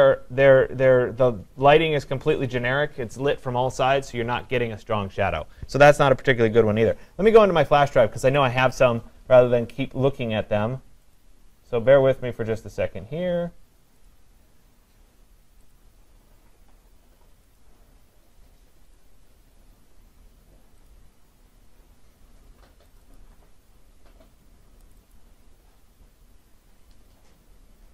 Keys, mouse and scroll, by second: 0.1-1.0 scroll, 1.0-5.2 scroll, 8.4 click, 11.2 click, 14.1 click, 15.7 click, 17.6 click, 19.0 click, 20.9 click, 23.0 click, 23.1 click, 24.9 click, 25.1 click.